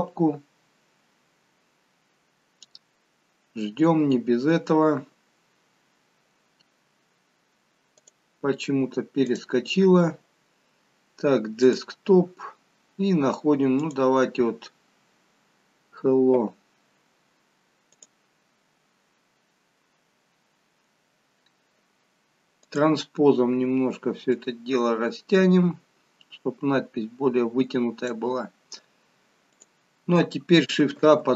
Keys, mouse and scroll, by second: 3.3 click, 7.9 click, 9.2 click, 22.5 click, 24.2 click, 29.5 click, 30.9 shift+a.